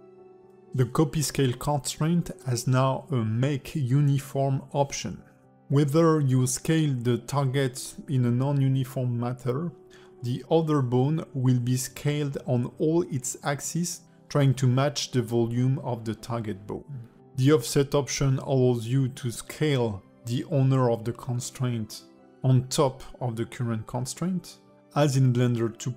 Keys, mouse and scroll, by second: 0.3 click, 0.8 shift+click, 1.3 ctrl+shift+c, 2.7 click, 3.1 s, 4.0 alt+middle click, 4.3 s, 5.7 click, 6.8 click, 8.2 click, 10.2 click, 10.9 click, 11.2 click, 11.6 s, 14.9 alt+middle click, 15.3 s, 17.1 s, 20.6 click, 21.0 alt+middle click, 22.0 click, 23.2 click, 24.8 click, 25.8 click.